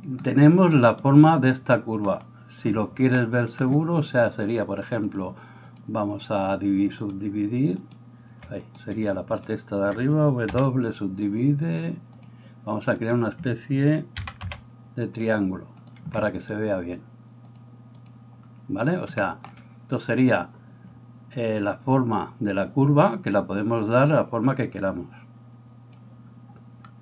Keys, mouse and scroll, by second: 0.9 right click, 5.2-16.0 drag, 7.0 right click, 7.8 shift+right click, 8.7 right click, 9.0-10.6 shift+middle drag, 10.6 w, 13.0 right click, 14.2 g, 16.0-17.6 middle drag, 17.6-27.0 drag.